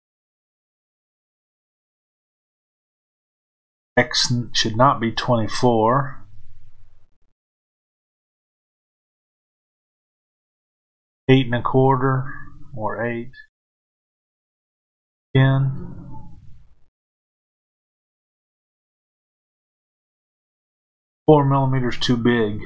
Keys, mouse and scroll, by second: 2.3-22.6 middle drag.